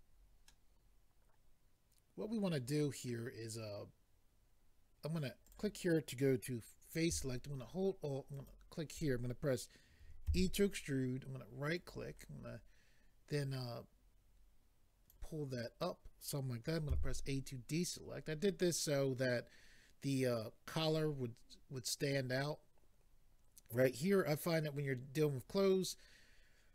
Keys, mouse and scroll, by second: 3.1 middle click, 5.5 click, 8.3 alt+click, 11.8 right click, 13.3 click, 16.9 a.